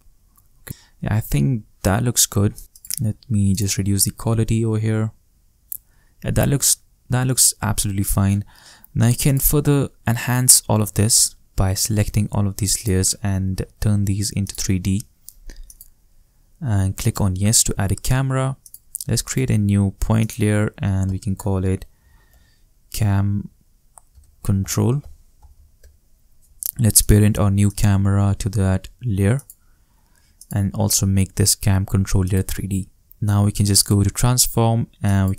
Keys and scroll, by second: 3.7 shift+space, 8.0 shift+space, 21.0-22.8 typing, 23.9-26.0 typing.